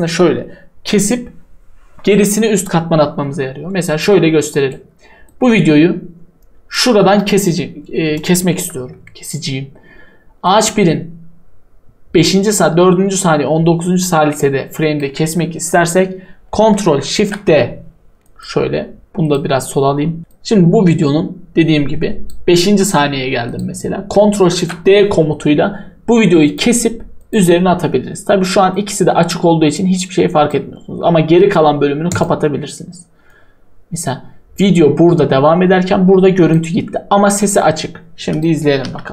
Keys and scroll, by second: 24.5 ctrl+shift+d.